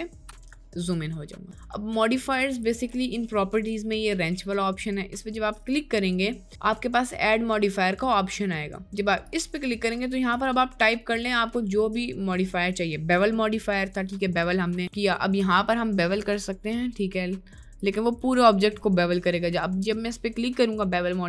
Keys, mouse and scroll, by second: 0.7-1.1 middle drag, 9.2-18.0 drag, 18.8 middle click.